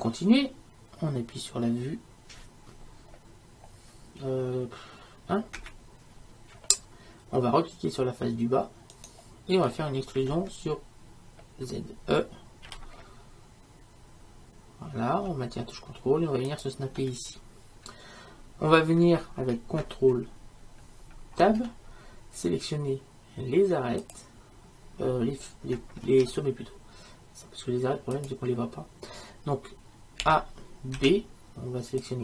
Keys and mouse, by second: 5.6 KP_1, 9.0-12.7 right drag, 12.7 e, 21.4 ctrl+Tab, 26.1 ctrl+Tab, 30.2 a.